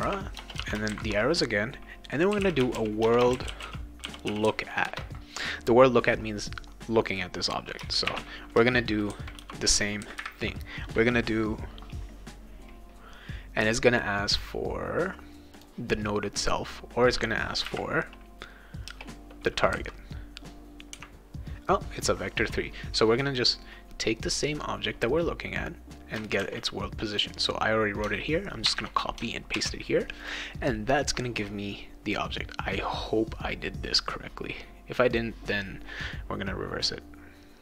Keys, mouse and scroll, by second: 0.0-0.9 typing, 2.0-5.0 typing, 8.1 shift+9, 9.4 ;, 15.6 click, 17.6 ,, 18.9 BackSpace, 24.5-26.2 drag, 26.4 ctrl+c, 27.1 click, 28.6 ctrl+v, 29.5 ctrl+s, 30.2 click, 35.1 click.